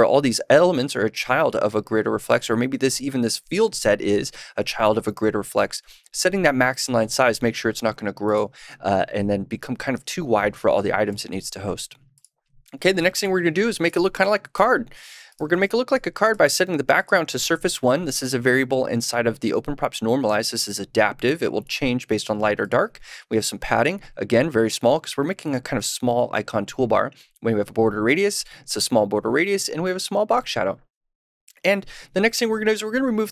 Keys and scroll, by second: 14.5 super+/, 15.5 super+s.